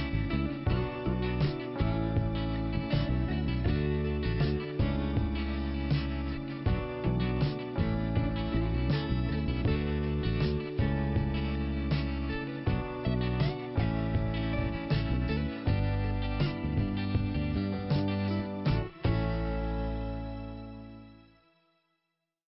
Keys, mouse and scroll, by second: 0.5 click, 12.0 middle click, 13.0-13.3 scroll down 1, 14.5-14.9 scroll down 2, 16.5 click.